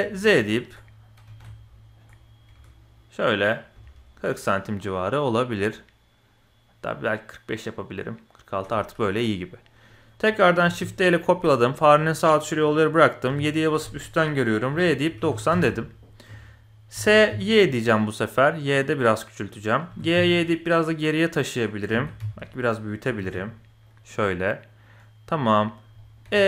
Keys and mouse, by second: 8.7-9.1 middle drag, 9.6 middle click, 10.6 shift+d, 13.2 KP_7, 14.7 r, 16.9 s, 19.8 g, 21.9 s, 23.0 g, 25.3 middle click, 25.9 middle click, 26.2 e.